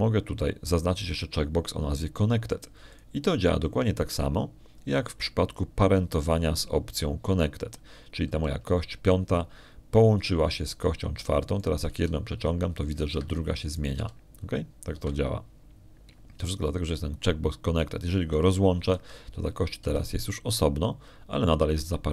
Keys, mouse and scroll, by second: 0.3 right click, 0.8 right click, 4.8 right click, 10.9 right click, 13.4 right click, 13.8 g, 15.0 Escape, 15.6 right click, 15.8 g, 16.8 Escape, 20.2 click, 21.7 g.